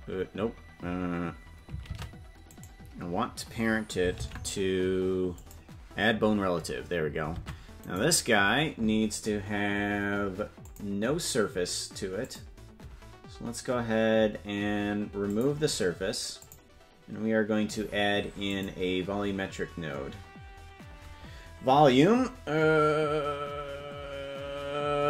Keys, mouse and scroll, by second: 2.2 ctrl+Tab, 3.0 right click, 4.5 ctrl+p, 7.9 ctrl+Tab, 8.4 right click, 10.9 click, 12.9 click, 15.2-16.8 drag, 18.8-25.0 drag.